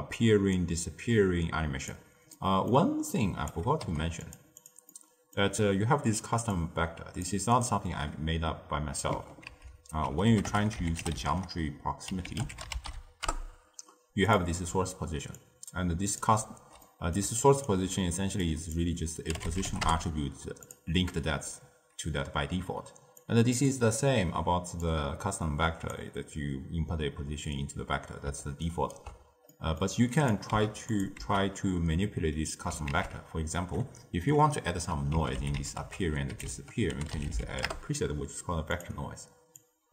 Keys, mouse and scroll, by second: 2.3-3.0 middle drag, 3.0 drag, 3.7 g, 6.6 click, 9.4 ctrl+a, 14.6-17.8 typing, 15.3 click, 16.8 middle click, 17.3 right click, 19.3 click, 23.1 drag, 26.0 click, 28.5 ctrl+right click, 29.4-30.1 middle drag, 30.1 click, 30.5 x, 30.8 click, 31.2 x, 32.8 ctrl+a, 39.5 drag.